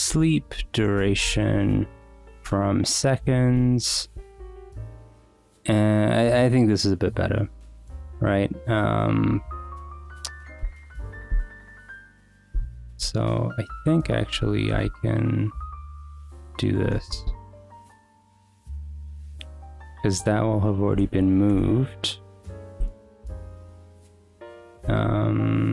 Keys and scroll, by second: 0.0-1.8 typing, 0.1 Return, 2.4 Return, 2.9 1, 3.2 Escape, 3.5 ;, 3.7 Escape, 4.1 Return, 9.2 k, 10.9-13.0 typing, 14.3-18.0 typing, 17.2 Return, 17.8 Escape, 19.5 ,, 20.8 BackSpace, 20.9 c, 21.5 Return, 22.8 Escape, 23.8 Escape, 24.8 b.